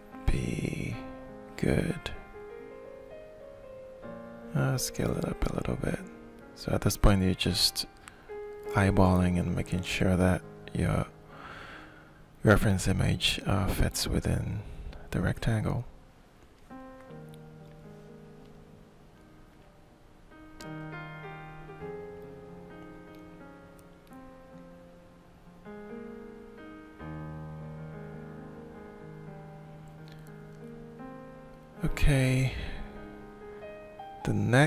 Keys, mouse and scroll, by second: 6.8 shift+middle click, 8.1-11.7 drag, 12.2-13.9 shift+middle drag, 14.5-16.9 drag, 18.8 middle click, 23.8 shift+middle click, 24.7-27.9 drag, 28.5-34.6 shift+middle drag.